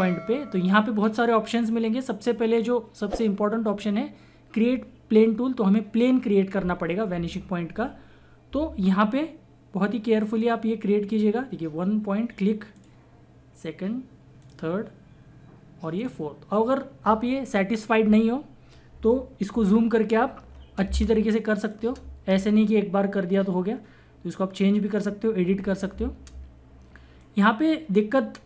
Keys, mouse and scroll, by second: 10.4 click, 12.8 click, 19.5 click, 19.7 ctrl+=, 20.8 space, 21.0 click, 21.3 space, 22.0 space, 23.3-25.9 drag, 25.9 space, 27.2 click.